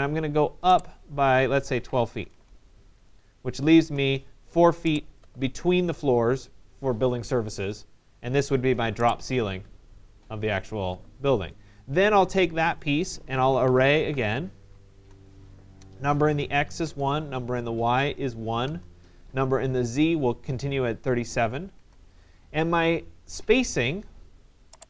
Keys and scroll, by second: 1.8 2, 2.4 Return, 14.2 y, 15.0 Return.